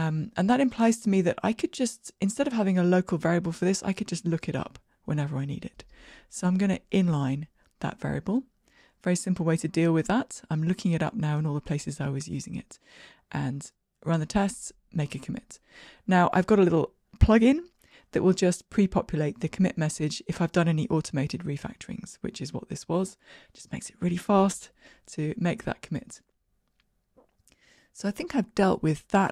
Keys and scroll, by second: 8.5 alt+super+n, 11.2 ctrl+r, 11.2 shift+F10, 13.2 ctrl+k, 26.0 shift+Escape.